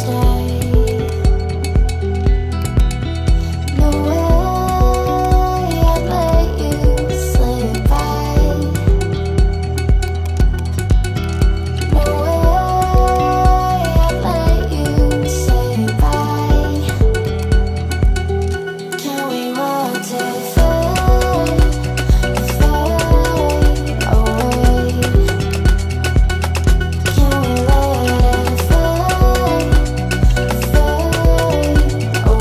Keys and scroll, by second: 27.5 Escape.